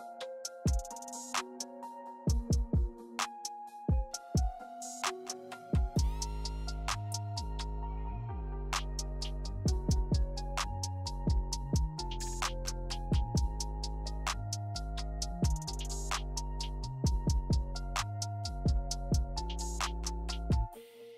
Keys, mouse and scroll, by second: 0.3 click, 0.7 click, 1.6 click, 2.0 click, 2.3 middle click, 2.5 click, 3.1 click, 3.5 scroll down 2, 3.6 middle click, 3.8 middle click, 4.5 click, 4.8 middle click, 4.9 scroll up 4, 5.1 shift+middle click, 5.3 middle click, 5.6 middle click, 6.1 click, 7.0 middle click, 7.3 shift+middle click, 7.7 click, 8.2 middle click, 8.2 scroll down 1, 8.7 click, 9.9 middle click, 10.4 click, 11.2 middle click, 11.7 click, 12.5 middle click, 13.2 click, 14.5 middle click, 14.8 click, 15.5 middle click, 15.7 scroll down 1, 15.7 middle click, 16.0 scroll up 1, 16.2 click, 16.8 middle click, 17.2 click, 17.4 click, 17.8 middle click, 18.1 click, 19.4 z.